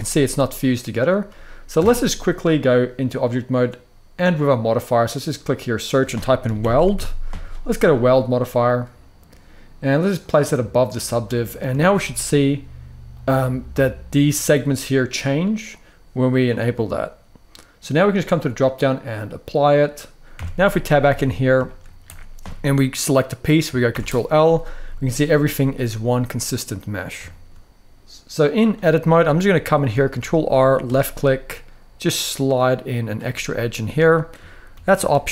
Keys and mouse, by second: 0.5-1.6 right drag, 1.6 Tab, 4.1-7.8 drag, 8.5 middle click, 9.9-10.7 drag, 11.5 shift+middle drag, 16.2-17.5 middle drag, 18.3-19.1 drag, 20.1 Tab, 20.4 middle drag, 20.8 alt+a, 21.4 shift+middle click, 23.6 ctrl+l, 24.6 g, 25.3 right click, 25.6 middle click, 27.1 shift+click, 27.6 ctrl+r, 28.3 click, 28.9 middle click, 29.8 ctrl+r, 32.8 click, 33.0 middle click, 33.8 shift+middle drag, 34.4 g, 34.7 y.